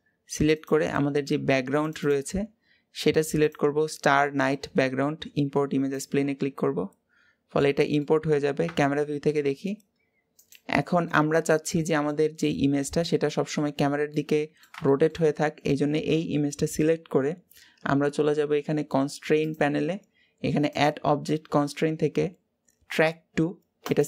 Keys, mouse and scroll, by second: 6.7-7.3 scroll down 2, 7.3-8.4 middle drag, 8.4 KP_0, 9.2 g, 10.8-13.0 middle drag, 13.0-13.9 scroll down 2, 13.9-20.4 middle drag.